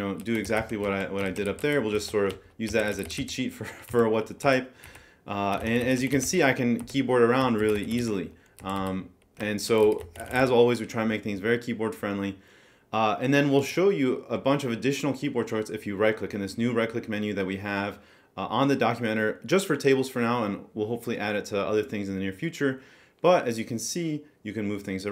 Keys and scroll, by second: 0.0-3.6 typing, 3.9 Down, 4.4 Right, 4.9 Up, 5.4-8.3 typing, 6.8 Right, 8.6 Down, 8.8 Left, 9.4-10.9 typing.